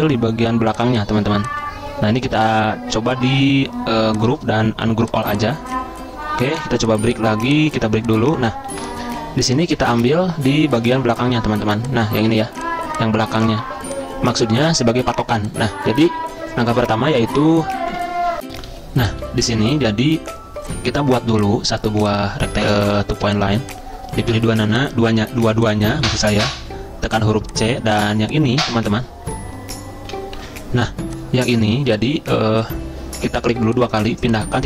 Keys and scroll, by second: 8.7 Delete, 10.0 ctrl+z, 13.7 z, 18.7 z, 19.2 z, 24.3 c, 25.5 z, 30.3 F10.